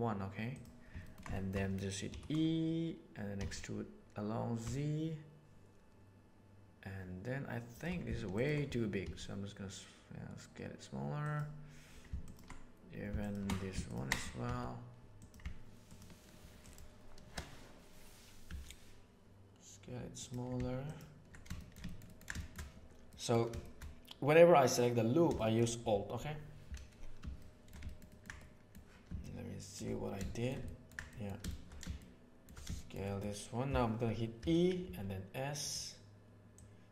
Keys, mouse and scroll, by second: 0.5 middle click, 1.0 ctrl+shift+middle click, 2.0 e, 8.3 alt+right click, 8.9 s, 14.4 s, 15.9 click, 16.6 click, 18.4 s, 21.5 shift+middle click, 22.3 shift+middle click, 23.0 middle click, 25.2 shift+middle click, 27.3 shift+middle click, 28.3 middle click, 31.9 middle click, 32.7 shift+middle click, 34.3 e, 36.5-36.9 middle drag.